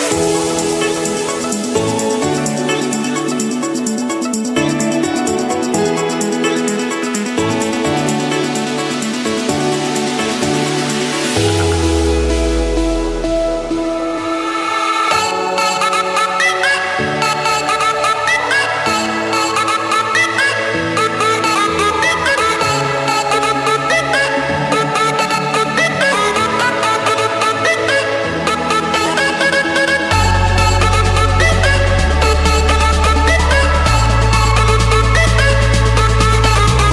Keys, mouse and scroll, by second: 1.1-2.0 typing, 3.4-5.6 typing, 6.3 Return, 8.1 middle click, 9.6 Escape, 11.3 click, 12.4 click, 12.6 Delete, 14.3 Return, 15.7-16.8 drag, 17.9 F8, 21.2 click, 21.9 Escape, 24.1-25.1 drag, 25.6-26.6 drag, 27.9 Delete, 29.8 click, 30.4 click, 31.3 middle click, 33.3 j, 34.6 Return, 36.0 click, 36.5 click.